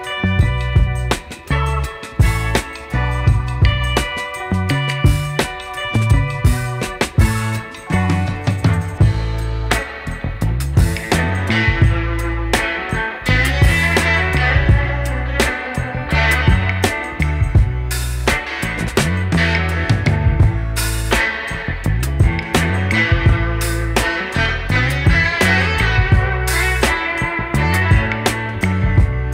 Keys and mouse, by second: 0.7-2.5 typing, 1.6 click, 2.6 click, 4.9 typing, 5.1 click, 6.2-6.5 typing, 6.5 click, 8.8-9.7 typing, 9.3 click, 10.9-13.3 typing, 12.3 click, 13.7 click, 26.7 click, 27.6 space, 27.7 click.